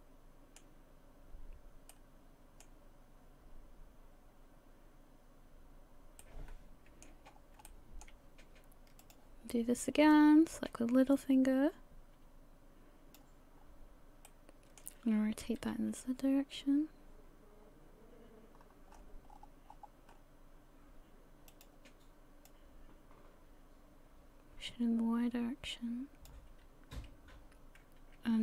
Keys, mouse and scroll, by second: 1.9 middle click, 6.2 middle click, 7.3-7.6 scroll up 4, 7.7 shift+middle click, 9.0 click, 10.1 click, 13.6-14.3 scroll down 1, 14.3 middle click, 14.3-15.4 scroll down 1, 15.4 r, 22.5 click.